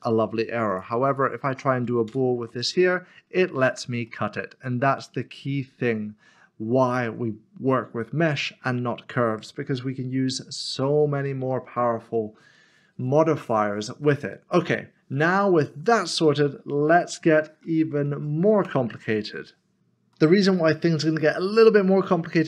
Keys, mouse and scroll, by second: 1.1 shift+click, 2.1 ctrl+shift+KP_Subtract, 3.0-3.6 scroll up 1, 4.1 middle click, 6.0-7.6 scroll down 1, 15.1-17.1 scroll down 1, 17.1 middle click, 18.6 Delete, 20.1 middle click.